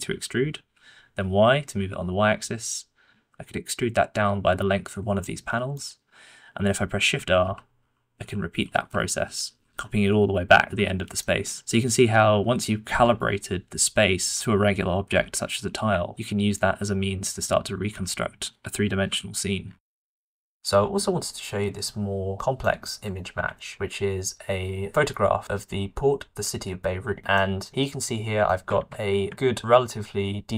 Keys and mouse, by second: 0.0 e, 7.7-11.6 typing, 11.1 shift+click, 12.8 Tab, 13.1 middle click, 14.2 middle click, 16.0 shift+click, 16.5 click, 17.4 click, 19.0 KP_Decimal, 22.6 shift+middle click, 23.5 alt+a, 27.4 shift+middle click, 27.8 middle click, 28.8 alt+a, 29.1 middle click, 29.3-30.5 shift+middle drag.